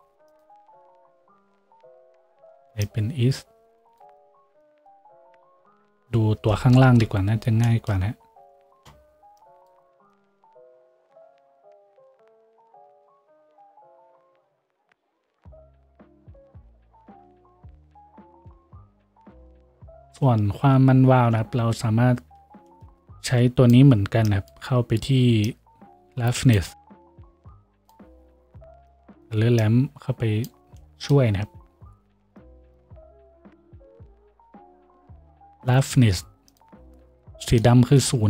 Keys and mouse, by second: 6.9 KP_Decimal, 21.1 middle click, 21.2 click, 21.4-27.4 middle drag, 27.4-28.5 shift+drag, 27.5 shift+d, 28.5-38.2 middle drag.